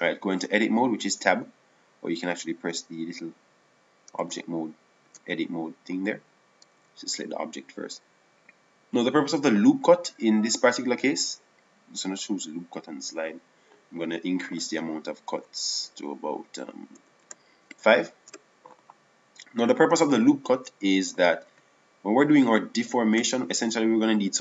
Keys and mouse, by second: 1.7 Tab, 5.6 Tab, 7.2 Tab, 11.7-14.3 drag, 21.9 Tab.